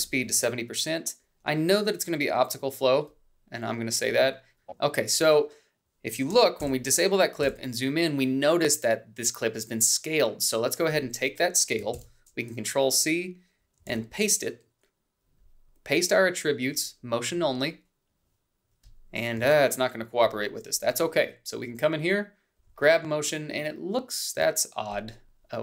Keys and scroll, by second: 6.1 ctrl+b, 9.1 ctrl+b, 10.0 ctrl+b, 14.5 ctrl+c, 16.4 alt+v, 22.0 ctrl+z.